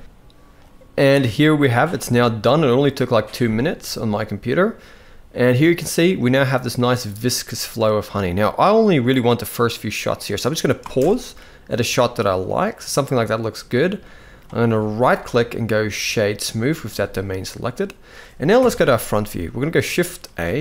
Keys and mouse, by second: 3.1 space, 5.7-6.3 middle drag, 6.7-7.2 middle drag, 10.5 space, 11.0-11.6 middle drag, 12.1-13.4 drag, 13.7 middle drag, 14.8-16.3 right drag, 16.6 shift+middle drag, 17.1 middle click, 18.2 KP_1, 19.9 shift+a.